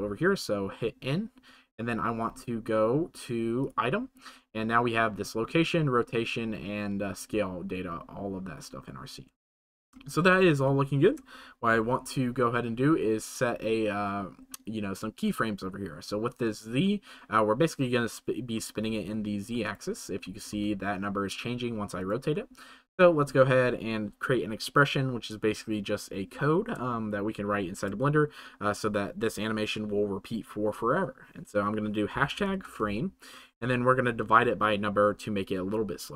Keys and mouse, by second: 9.5 shift+middle click, 10.7 middle click, 22.8 click.